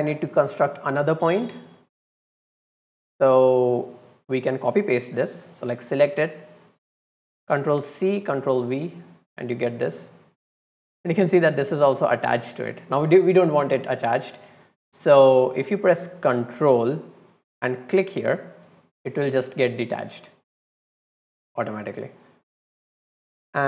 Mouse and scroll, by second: 2.5-3.5 drag, 4.0-4.6 drag, 5.6 click, 5.8 click, 6.1 click, 9.2-10.3 drag, 10.7 middle click, 17.8 click, 20.8-21.1 drag, 22.1 click, 22.9 middle click.